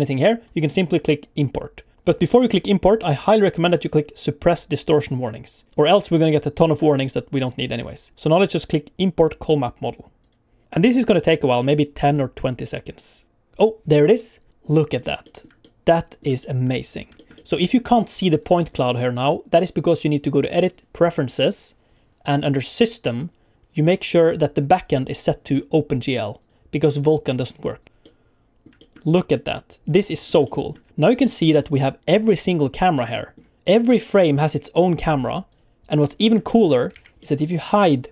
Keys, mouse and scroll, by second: 14.5 middle click, 15.2 shift+middle click, 15.6 middle click, 16.4 shift+middle click, 16.8 scroll up 2, 17.1 shift+middle click, 17.3 middle click, 19.9 click, 28.1 middle click, 28.7 shift+middle click, 29.1 scroll down 1, 29.3 middle click, 30.1 scroll up 3, 30.4 shift+middle click, 30.9 shift+middle click, 31.2 ctrl+middle click, 31.6 shift+middle click, 32.3 click, 32.8 click, 33.1 middle click, 33.6 click, 33.9 click, 34.2 click, 34.5 click, 34.8 click, 35.1 click, 35.5 click, 35.8 click, 36.4 shift+middle click, 36.9 alt+a, 37.2 middle click, 37.7 click, 37.9 click.